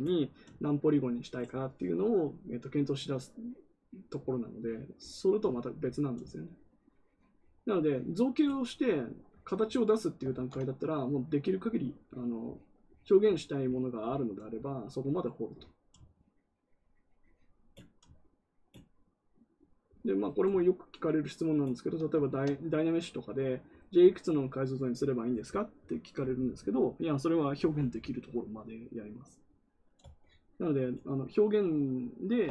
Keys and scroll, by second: 10.3 ctrl+z.